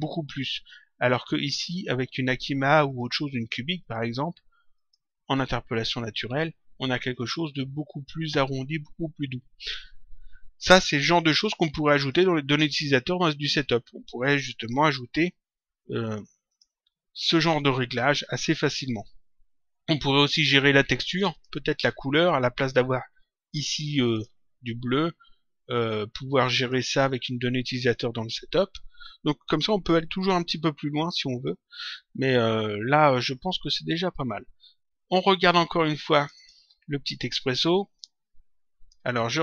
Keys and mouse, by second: 1.3 click, 2.8 click, 7.1 click, 12.0 click, 16.4 click, 21.1 click, 24.0 click, 26.3 click, 27.7 click, 36.1 click, 37.9 click.